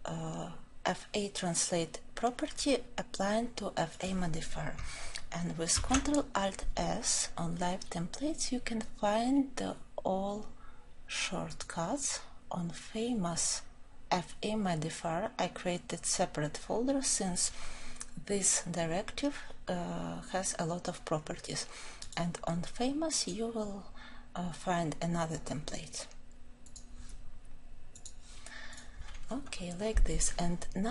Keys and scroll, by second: 28.0 ctrl+alt+s.